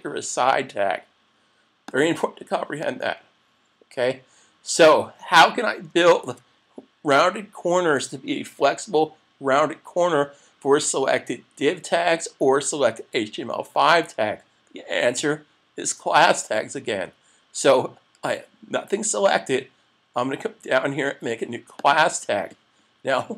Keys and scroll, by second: 6.2 super+s.